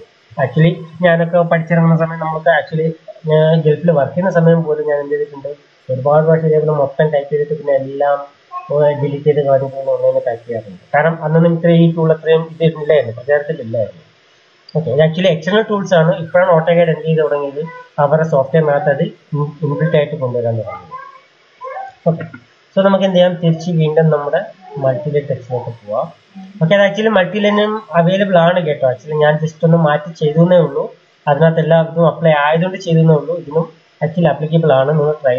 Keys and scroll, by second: 32.2 ctrl+a.